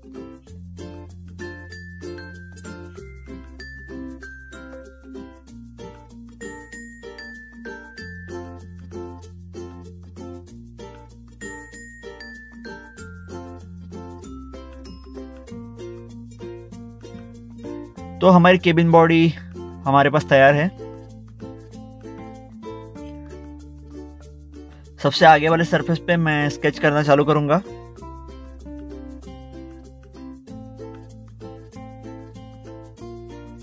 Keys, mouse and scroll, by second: 6.3 click, 6.5 click, 12.4 click, 14.0 click, 15.4 click, 15.6 click, 17.5 click, 20.6 scroll up 1, 21.0 scroll down 1, 22.0 middle click, 23.0 middle click, 23.2 scroll down 1, 24.0 middle click, 24.8 middle click, 25.8 scroll down 1, 26.9 click, 27.3 click, 29.1 scroll up 1, 30.3 middle click, 31.3 click.